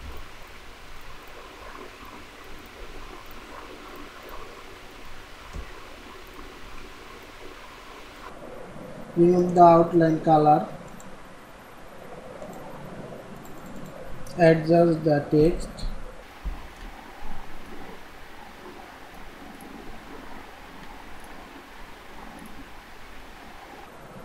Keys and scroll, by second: 0.2 ctrl+c, 5.5 ctrl+v, 6.7 ctrl+a, 7.4 ctrl+a, 15.2 ctrl+shift+,, 16.3 ctrl+shift+,.